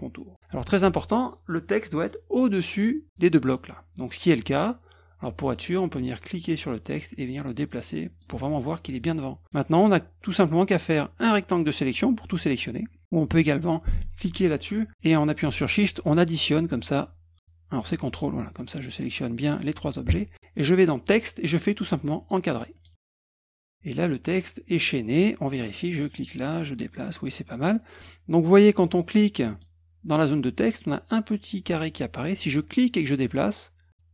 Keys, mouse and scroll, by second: 1.6 click, 3.4 click, 5.4 click, 6.5-8.2 drag, 9.4 click, 10.6-11.8 drag, 13.5 click, 15.6 shift+click, 16.2 shift+click, 17.7 ctrl+click, 20.9 click, 22.2 click, 22.7 click, 23.2 click, 25.0 click, 26.2-28.0 drag, 29.5 click, 32.6-33.9 drag.